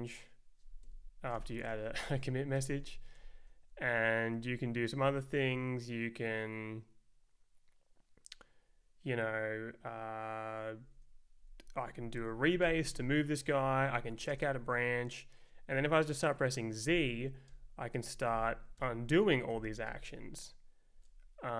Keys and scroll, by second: 0.8 Escape, 1.1-2.2 typing, 2.6 Return, 3.2 Right, 4.3 Left, 5.0 Down, 10.8 Right, 11.4 Down, 11.6 Up, 12.6 ctrl+j, 13.6 Left, 13.9 Down, 14.1 Up, 14.3 space, 16.8 z, 17.5 Return, 18.3 z, 18.8 Return, 19.5 z, 19.9 Return, 20.9 Left.